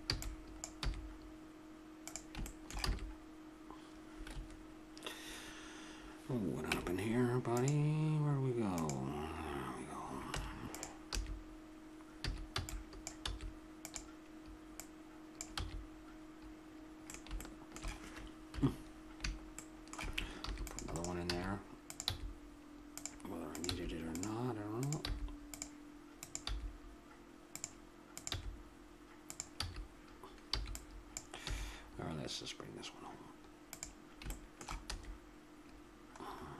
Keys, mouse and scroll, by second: 0.1 b, 0.8 e, 2.9 a, 2.9 s, 4.3 Escape, 5.5 `, 6.7 Tab, 10.1 click, 10.3 Tab, 11.1 a, 12.2 a, 12.5 b, 13.2 s, 14.8 click, 15.6 a, 18.5 KP_7, 20.4 ctrl+r, 21.2 a, 21.8-23.9 drag, 22.0 g, 23.7 g, 25.1 g, 26.5 g, 28.3 g, 29.6 a, 31.1 b, 31.4 e, 34.3-36.2 drag, 34.9 a, 36.2 middle click.